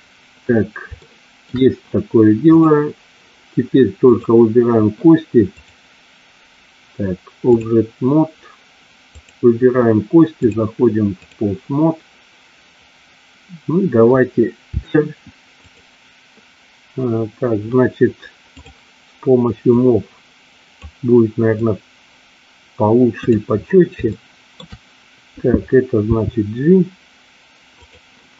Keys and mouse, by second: 0.9 shift+middle click, 2.7 click, 4.1 click, 5.5-7.5 drag, 9.1 click, 10.2-11.3 drag, 14.6 r, 15.5 click, 19.8-20.8 drag, 21.6-23.3 drag, 24.0 shift+middle click, 26.1 g, 27.8 click.